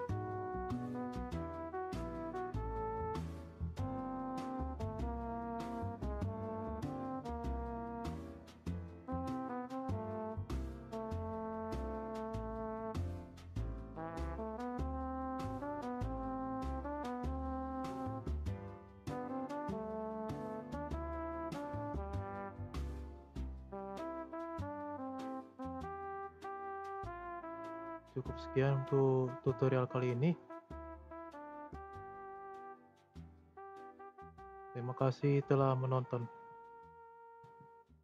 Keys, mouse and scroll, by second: 1.0-1.6 scroll up 1, 1.6 space, 1.9-4.9 middle drag, 7.0 space, 7.3-8.4 middle drag, 8.4-11.9 drag, 12.4 space, 13.2-14.4 middle drag, 14.4 space, 15.9 click, 17.2 click, 17.7 space, 18.3-23.3 middle drag, 23.3 space, 23.5-24.8 middle drag, 24.8 scroll down 1, 25.0 drag, 25.3-26.1 scroll up 2, 25.3-25.8 middle drag, 26.1-31.0 shift+middle drag, 31.0-31.7 scroll down 1, 31.7-34.9 middle drag.